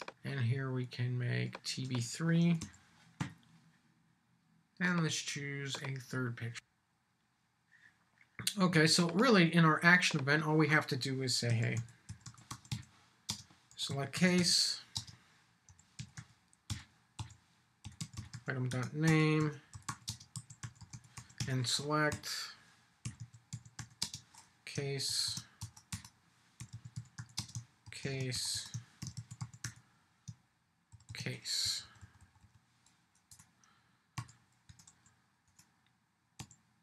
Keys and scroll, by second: 18.7 Return, 22.1 Up, 25.1 shift+', 25.3 shift+', 25.6 Return, 31.6 Left.